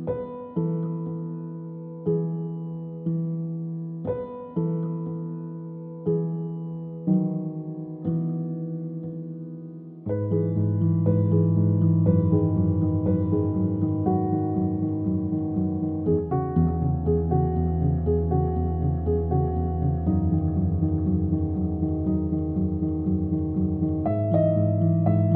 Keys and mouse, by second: 0.4 g, 1.6 click, 1.6 g, 4.0 g, 5.3 Tab, 5.3 click, 5.4 Tab, 6.6 click, 6.7 click, 7.4 click, 8.1 g, 10.1 click, 10.1 g, 11.7 middle click, 12.0 KP_1, 12.6 Tab, 13.0 Tab, 13.0 click, 13.1 g, 15.4 g, 16.5 click, 16.9 g, 19.2 click, 19.2 g, 20.6 click, 21.2 g, 21.5 g, 22.9 g, 23.7 click, 23.8 g, 24.3 Tab, 24.6 alt+middle click, 25.2 shift+middle click.